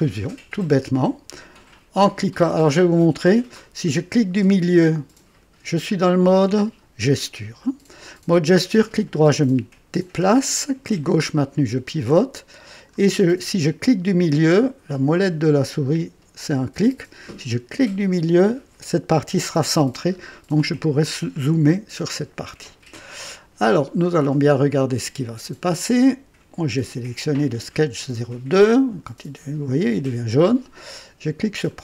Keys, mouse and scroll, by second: 2.5 scroll down 2, 6.0 scroll up 2, 8.8-10.9 right drag, 8.8 click, 11.0-13.1 drag, 17.8 middle click, 20.1-20.4 scroll up 2, 21.3 right click, 23.6-25.7 drag, 31.6 click.